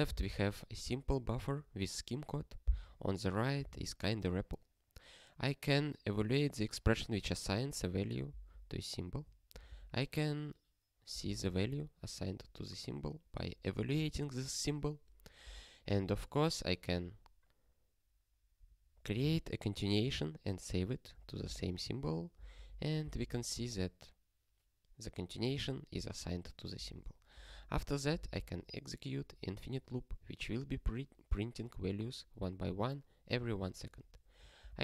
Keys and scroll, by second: 8.4 ctrl+e, 9.5 ctrl+n, 9.7 ctrl+n, 11.4 ctrl+e, 15.8 ctrl+alt+f, 21.6 ctrl+e, 22.5 ctrl+alt+f, 23.3 ctrl+e, 27.3 ctrl+alt+f, 28.3 ctrl+e.